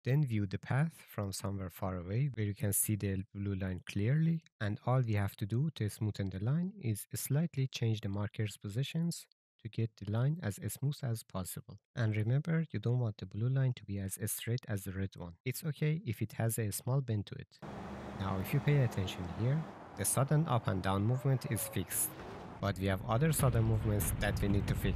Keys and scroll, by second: 0.2 1, 1.5 ctrl+z, 1.9 a, 4.0-5.2 typing, 6.2 shift+a, 6.4 s, 7.2 shift+a, 9.6-10.5 typing, 11.8-14.1 typing, 16.1 shift+a, 16.4 d, 17.2 shift+a, 23.2 alt+Down.